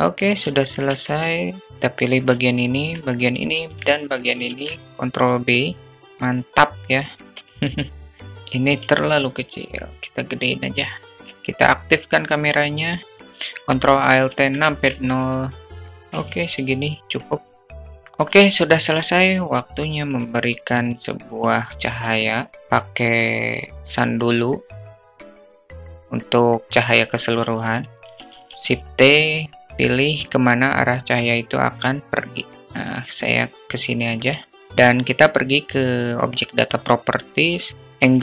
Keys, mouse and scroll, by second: 0.2 alt+shift+click, 0.5 Tab, 1.4 click, 1.7 shift+click, 2.0 alt+shift+click, 2.8 shift+click, 4.0 ctrl+b, 5.8 Tab, 7.2 q, 8.2 s, 10.6 click, 11.1 shift+a, 13.7 ctrl+shift+a, 15.2 ctrl+alt+q, 15.5 shift+a, 16.5 q, 20.2-21.0 drag, 21.2 shift+a, 25.1-26.5 drag, 27.8 shift+t, 35.6 click, 37.8-38.2 drag.